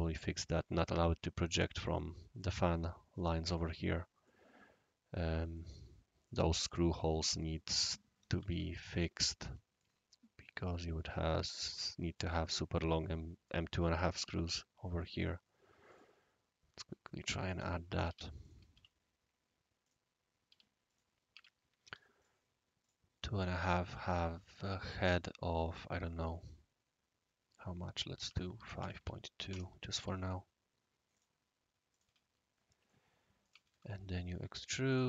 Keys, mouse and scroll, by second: 0.1-0.8 scroll up 2, 0.8 scroll down 1, 0.8-1.5 scroll up 1, 1.5 click, 3.5 click, 4.2-5.6 right drag, 6.2-6.7 right drag, 7.4-7.9 right drag, 8.5 shift+s, 8.7 click, 9.1 scroll up 1, 9.2-9.8 middle drag, 9.8-11.0 right drag, 11.5-12.2 right drag, 13.0-13.5 right drag, 14.2 c, 15.2 click, 15.6 typing, 15.9 click, 17.6-18.7 typing, 18.4 click, 19.8 click, 20.5 typing, 20.9 click, 21.3 Escape, 21.8 d, 22.1 click, 22.8 click, 23.0 click, 23.0 typing, 28.2-29.7 typing, 29.9 Escape, 31.1 click, 31.9 click, 32.0 e, 32.3 click, 32.9 middle click, 33.6 shift+e, 34.9 click.